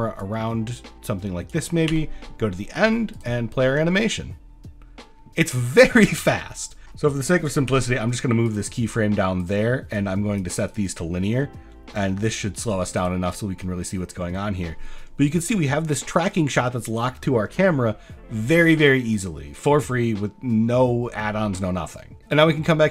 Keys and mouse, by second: 0.2-1.5 drag, 3.2 click, 3.8 space, 7.7 g, 8.5 click, 9.5 click, 10.1 click, 10.8-12.4 drag, 13.0 click, 22.3-22.9 drag.